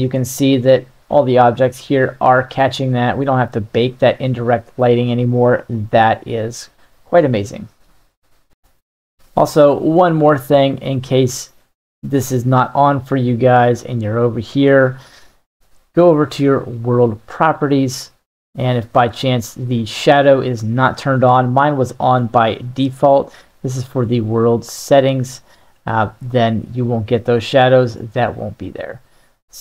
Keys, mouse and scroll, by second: 2.6-6.1 middle drag, 8.5-10.2 middle drag, 12.1 click, 13.8 click, 16.9 click, 25.7-26.3 middle drag, 27.3 click, 28.0 click, 28.6 click, 29.1 click.